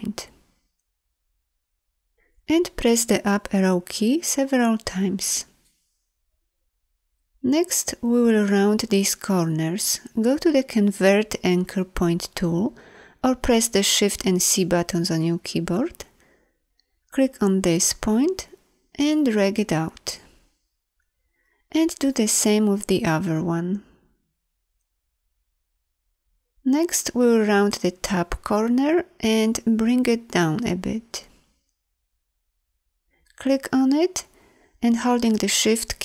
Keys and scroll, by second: 3.0 Up, 10.7 shift+c.